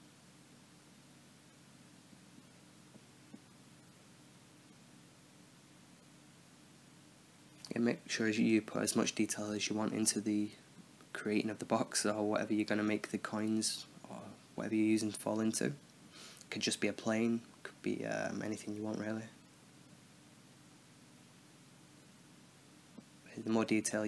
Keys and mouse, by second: 0.0-3.3 typing, 0.0 Tab, 0.4 Tab, 0.5-0.8 middle drag, 1.0 middle click, 1.1 drag, 1.1 middle click, 1.4 click, 2.0 click, 2.2 middle click, 2.6 click, 2.9 click, 3.1 middle click, 3.4 Tab, 3.5 click, 3.9 click, 4.1 middle click, 4.2 click, 4.7 middle click, 4.8 drag, 5.1 middle click, 5.3 shift+a, 5.4 click, 5.7 middle click, 5.8 drag, 5.8 s, 6.0 drag, 6.2 middle drag, 6.2 s, 6.3 middle click, 6.6 Tab, 6.7 ctrl+r, 6.8 ctrl+r, 7.0 click, 7.0 right click, 7.1 ctrl+b, 7.6 right click, 7.8 ctrl+b, 8.0 right click, 8.1 ctrl+b, 8.5 Tab, 8.5 middle click, 8.7 Tab, 9.3 ctrl+r, 9.4 s, 9.8 Tab, 9.8 middle click, 10.1 a, 10.2 a, 10.2 t, 10.4 middle click, 10.6 Tab, 10.8 click, 11.0 middle click, 11.8 Tab, 12.3 o, 12.4 click, 12.6 Tab, 13.2 shift+d, 13.8 click, 14.7 right click, 15.1-18.8 typing, 15.3-15.8 drag, 16.6 click, 17.2 click, 17.5 drag, 17.7 Tab, 17.9 click, 18.3 drag, 18.4 Tab, 18.5 Tab, 18.5 ctrl+r, 19.1 Tab, 19.2-19.6 middle drag, 19.6 Tab, 19.8 Tab, 19.9-21.5 typing, 19.9 Down, 21.0-21.4 drag, 21.2 Tab, 21.9 middle click, 22.3 ctrl+b, 22.8-23.9 typing, 23.3 Tab, 23.6 click.